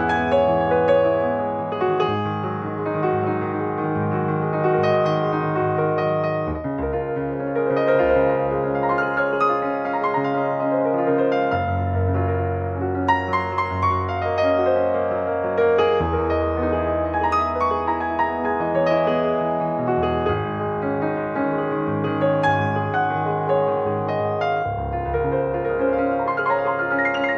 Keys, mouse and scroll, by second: 0.0-1.2 middle drag, 1.2 click, 2.9 scroll down 1, 3.0 middle click, 3.4 click, 3.6 middle click, 3.8-4.6 scroll up 3, 4.1 middle click, 4.6 middle click, 5.5 scroll down 1, 5.7-9.0 middle drag, 9.1 click, 10.1 scroll down 2, 10.6-11.6 middle drag, 11.6 click, 11.9 scroll up 2, 12.1-13.5 middle drag, 13.5-14.7 drag, 14.7 scroll up 1, 14.8 scroll down 1, 15.1 middle click, 15.5 scroll up 1, 15.8 middle click, 16.1 click, 16.4 scroll down 1, 16.7-18.2 middle drag, 18.2 click, 18.5-21.6 drag, 21.9 scroll up 2, 22.1-25.0 middle drag, 25.1-27.3 drag.